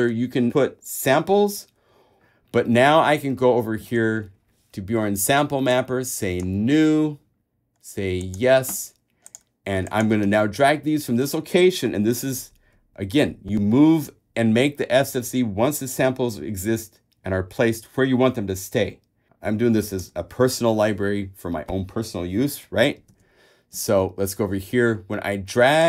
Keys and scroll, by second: 3.2 super+Tab, 10.4 super+a, 23.3 super+Tab.